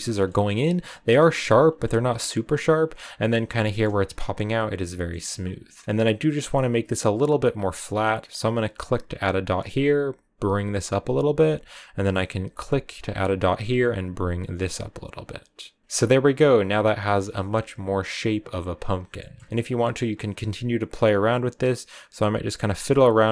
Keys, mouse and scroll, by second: 0.3-1.3 scroll up 1, 1.3 shift+middle click, 2.8-5.5 middle drag, 5.5-7.1 scroll up 2, 10.7-12.6 drag, 13.1-15.8 drag, 15.8-21.0 shift+middle drag, 21.0-23.3 drag.